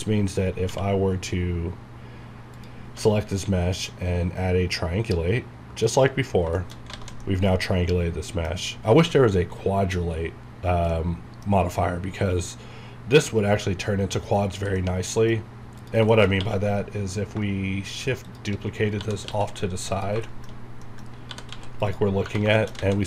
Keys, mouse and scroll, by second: 2.5 click, 4.9 q, 5.8 click, 6.3 scroll down 1, 6.5 middle click, 6.6 shift+middle click, 7.2-8.8 middle drag, 8.8-10.5 scroll up 1, 10.9 scroll down 1, 10.9 middle click, 11.8 scroll up 1, 14.3-14.8 scroll down 1, 14.8 middle click, 15.4 scroll down 1, 15.8 click, 16.1 shift+middle click, 16.2 scroll down 2, 18.2 shift+click, 18.7-19.8 typing, 19.9 click, 20.2 shift+middle click, 20.5 shift+scroll up 2, 20.8 middle click, 21.0-22.0 typing, 21.1 scroll down 1, 21.8 click, 22.2 scroll up 1, 22.5 shift+middle click.